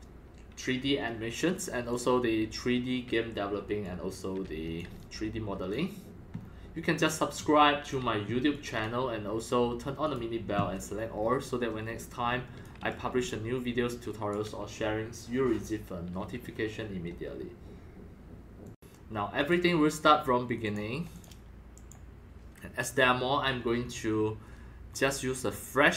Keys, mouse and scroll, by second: 1.9 click, 3.8-4.7 drag, 4.8-5.5 typing, 5.0-5.7 drag, 6.3 scroll down 3, 6.7-9.0 typing, 7.0-7.9 drag, 8.5 click, 10.0 click, 10.2 click, 11.2-11.7 scroll up 3, 11.7 scroll down 2, 11.8 scroll, 11.8 x, 12.0 click, 13.1 right click, 13.2 w, 13.4 w, 13.9 right click, 14.3-16.1 right drag, 18.2 right click, 18.6 click, 19.4 click, 20.6 click, 21.1 click, 21.8 click, 23.7-25.9 drag.